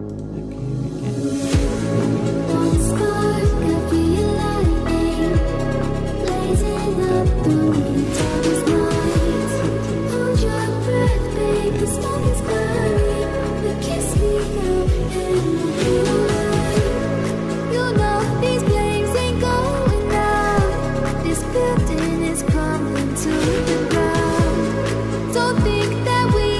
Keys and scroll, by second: 6.1 ctrl+s, 21.8 ctrl+s.